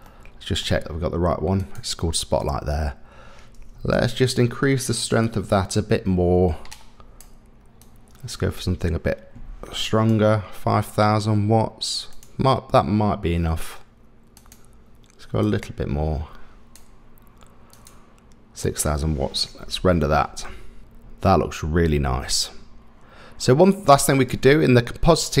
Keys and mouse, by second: 0.0 middle click, 1.7 click, 2.4-2.7 middle drag, 3.7 KP_0, 5.2-7.2 drag, 7.8-10.1 drag, 12.2 click, 14.5 click, 15.5-16.8 drag, 19.8 F12.